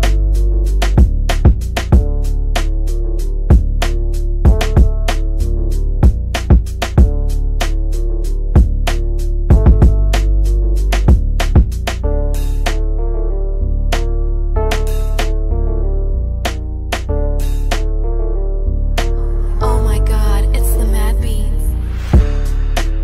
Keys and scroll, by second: 8.9-11.8 typing.